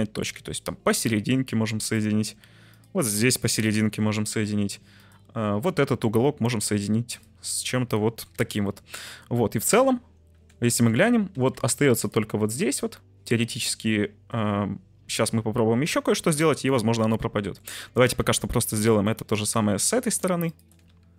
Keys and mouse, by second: 0.3 j, 3.6 j, 7.1 shift+click, 8.3 j, 9.3 middle click, 9.8 Tab, 10.3 Tab, 10.8 shift+middle click, 11.3 1, 14.4 Tab, 16.0-17.6 middle drag, 17.7 Tab, 18.1 1, 18.6 right click, 19.1 middle click, 20.5 shift+click.